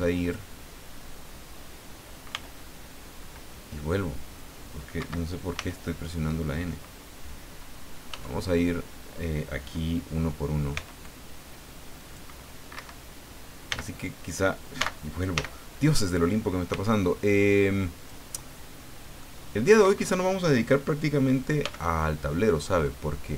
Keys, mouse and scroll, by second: 2.3 n, 5.0 Escape, 5.6 f, 8.1 f, 10.7 c, 11.0-12.3 drag, 12.7 Escape, 13.7 n, 14.8 n, 16.7 c, 17.3-18.3 drag, 19.2 middle click, 19.8 Escape, 21.6 f, 23.0 scroll up 2.